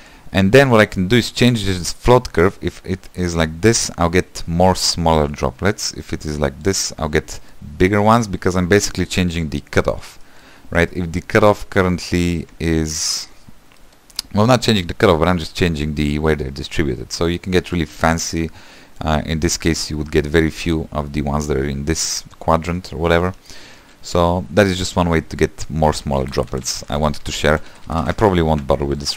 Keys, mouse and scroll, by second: 23.2-24.3 scroll down 1, 26.3-27.0 ctrl+z, 27.2-28.5 ctrl+z.